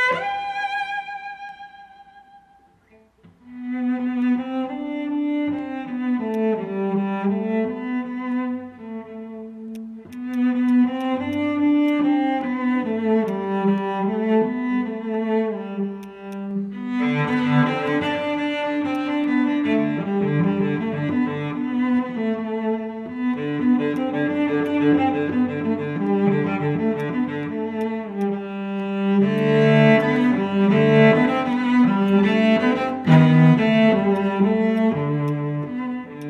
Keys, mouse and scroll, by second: 2.2-2.7 scroll down 1, 5.4 scroll up 1, 7.1 scroll down 1, 9.7 right click, 12.1 scroll up 1, 13.0 alt+middle click, 13.2 alt+click, 15.6 scroll up 1, 15.8 alt+middle click, 16.0 alt+click, 16.2 alt+click, 17.2 alt+middle click, 18.0-18.9 scroll down 1, 23.6 right click, 27.7 alt+click, 28.2 alt+click, 28.7 alt+middle click, 29.2 scroll down 1, 29.3 alt+click, 29.6 alt+middle click, 29.9 alt+click, 32.0 alt+click, 33.4 alt+middle click, 33.8 scroll down 1, 33.9 alt+middle click, 34.1 alt+click, 34.5 alt+middle click, 34.7 alt+click, 35.2 alt+middle click.